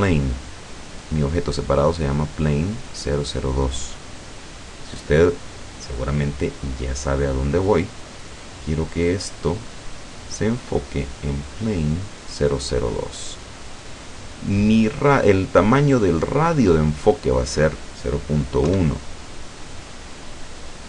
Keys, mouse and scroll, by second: 1.1 right click, 5.9 right click, 7.6 click, 9.9 click, 10.7 click, 12.1 click, 18.7 F12.